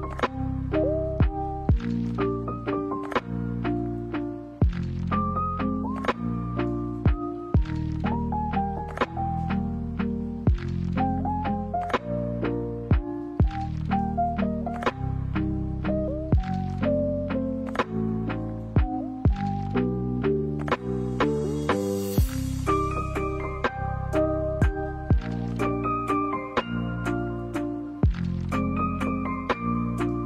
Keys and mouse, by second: 0.9-1.6 middle drag, 2.6-3.1 drag, 3.3 middle click, 4.1 middle click, 6.0 alt+right click, 6.2 middle click, 7.0 g, 9.6 alt+right click, 10.0 g, 11.2 middle click, 12.1 middle click, 13.4 middle click, 15.2 shift+a, 19.0 shift+a, 27.2-29.0 middle drag, 29.4 g.